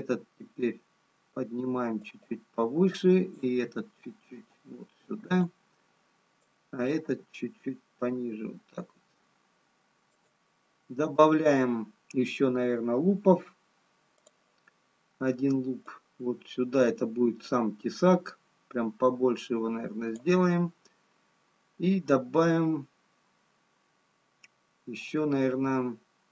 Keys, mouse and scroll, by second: 0.1 g, 3.7 click, 3.7 g, 7.6 click, 7.6 g, 14.6 click, 19.7 click.